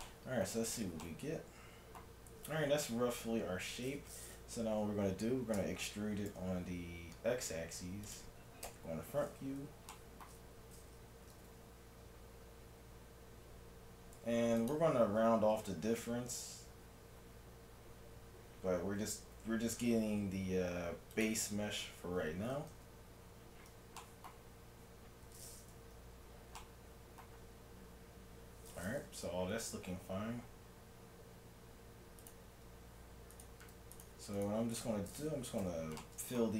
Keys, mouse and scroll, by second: 2.4 a, 2.8 a, 5.6 e, 8.7 KP_1, 10.0-11.7 middle drag, 11.3 g, 15.9 z, 19.0 g, 21.8 z, 22.7 KP_3, 24.1-26.4 middle drag, 26.0 z, 27.4 z, 32.2-36.0 right drag, 35.6 f.